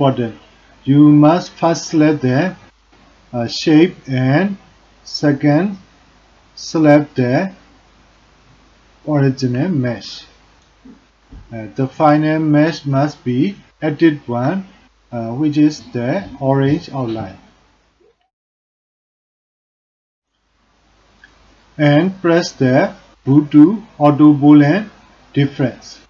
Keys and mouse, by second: 4.9 shift+click.